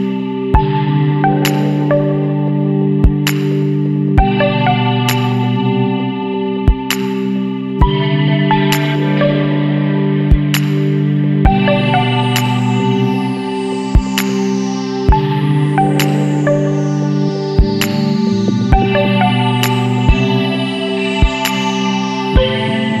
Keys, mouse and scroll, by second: 0.1 click, 3.0-4.7 middle drag, 3.2 click, 3.8 click, 4.8-5.1 scroll down 1, 5.5-6.5 middle drag, 5.8 click, 6.6-6.9 scroll down 1, 7.8-8.9 middle drag, 8.1-9.1 drag, 9.1 middle click, 9.8-10.1 scroll down 1, 10.3-10.6 scroll up 1, 11.1 scroll up 1, 14.1 click, 15.8 KP_6, 18.5 click, 22.5 click.